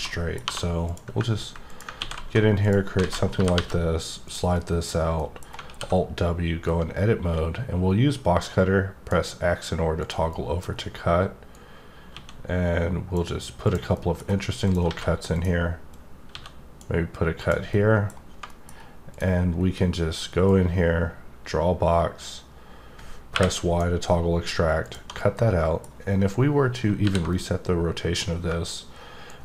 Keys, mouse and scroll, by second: 0.1 middle click, 0.8 click, 1.7 click, 2.6 click, 4.2 click, 4.5 middle click, 5.1 middle click, 6.9-9.1 drag, 10.0 click, 10.3 middle click, 10.6-11.5 scroll up 1, 11.5-13.3 drag, 13.6 click, 13.9 middle click, 14.6 click, 15.3 click, 15.9 click, 17.3 click, 17.7 middle click, 18.4 middle click, 19.1 click, 19.5-20.4 scroll down 1, 20.4-23.9 drag, 24.8 click, 25.1 middle click, 27.3 middle click, 29.2-29.4 drag.